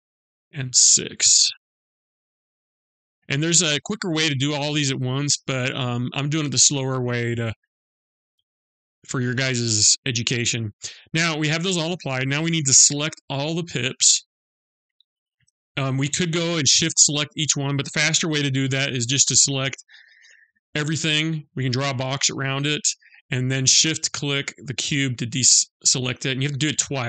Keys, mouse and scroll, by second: 0.2 click, 1.6 click, 4.1 click, 6.8 middle click, 8.3 middle click, 13.3 middle click, 20.2 click, 24.2 shift+click, 26.2 shift+click.